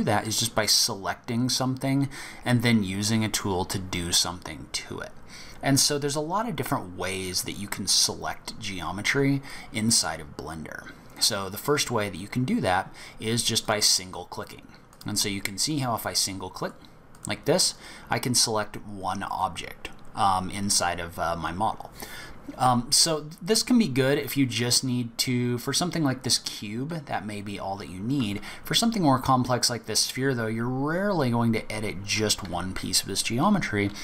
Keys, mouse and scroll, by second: 9.5 middle click, 10.4-11.0 scroll up 2, 11.0-12.5 scroll down 2, 13.6 click, 14.9 click, 15.7 click, 16.6 click, 17.1 click, 17.5 click, 27.2-27.8 scroll down 2, 27.8-28.2 scroll up 1, 28.2 s.